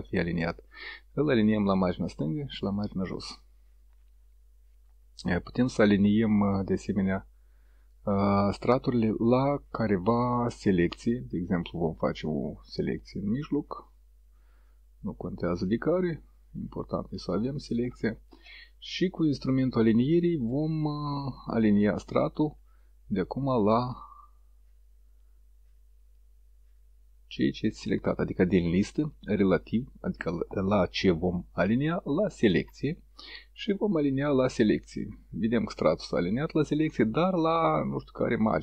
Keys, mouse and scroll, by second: 1.3 click, 2.7 click, 9.9 click, 11.5-13.5 drag, 13.9-15.0 drag, 15.8 click, 19.5 click, 21.3 click, 26.0 click, 28.5 click, 29.2 click, 32.4 click, 34.0 click.